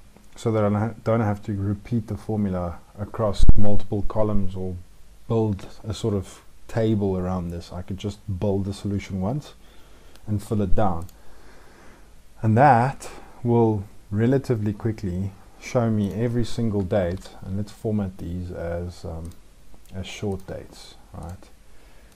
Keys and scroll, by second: 16.9 ctrl+shift+Down.